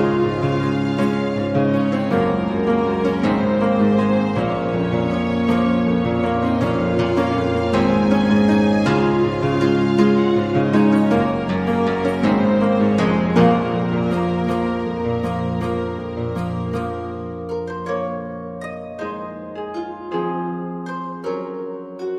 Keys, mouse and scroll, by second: 0.2-1.6 drag, 1.9-2.9 drag, 4.7 click, 7.3 click, 9.0-11.4 shift+drag, 11.8 click, 12.4 click, 14.2-16.1 drag, 17.5 middle click, 18.8-19.9 drag, 19.9 g, 21.4 a, 21.5 a, 21.6 middle click, 21.6 a.